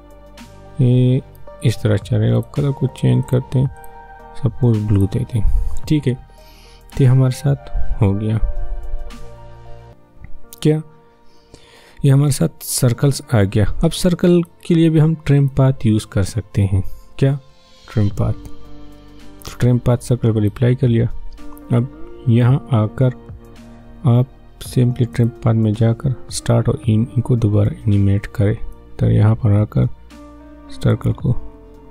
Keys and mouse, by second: 17.1 click, 20.3 click, 25.1 click, 28.7-31.9 drag.